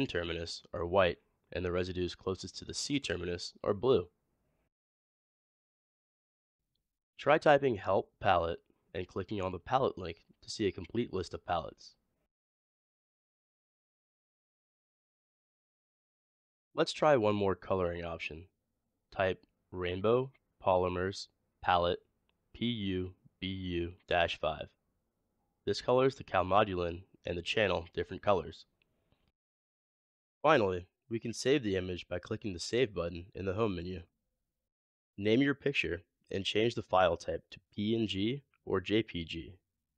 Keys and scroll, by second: 6.9-7.6 typing, 18.6-19.9 typing, 24.3-25.5 typing.